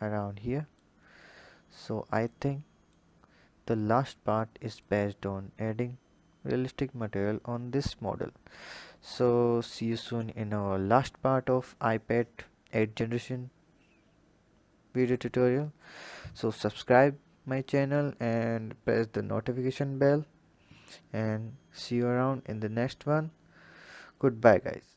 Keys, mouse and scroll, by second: 0.9-2.1 scroll up 3, 2.1 click, 3.5-4.7 drag, 8.0-9.4 scroll down 1, 9.4 click.